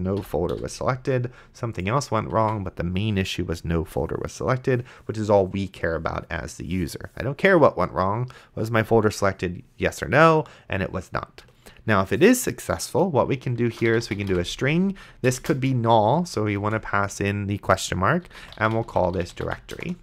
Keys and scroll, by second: 0.0-0.5 typing, 0.2 End, 2.4 Tab, 13.6-16.6 typing, 18.0-20.0 typing.